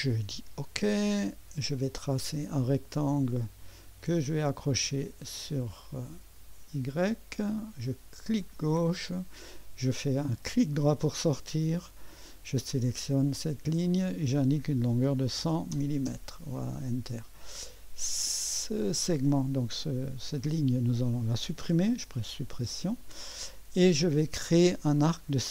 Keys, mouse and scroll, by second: 0.6 click, 2.3-3.8 drag, 3.0 middle click, 3.0-4.1 right drag, 5.8 click, 8.2 click, 10.5 right click, 12.0 click, 13.7 click, 14.8-16.2 typing, 18.8-19.8 drag, 18.8 typing, 22.1 Delete, 25.0 click.